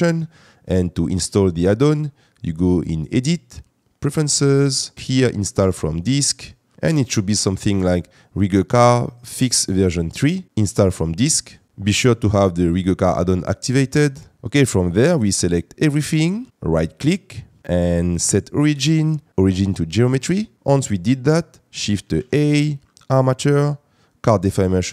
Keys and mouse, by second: 3.0-4.2 drag, 16.7-20.2 right drag, 20.5 shift+a, 22.1 shift+a.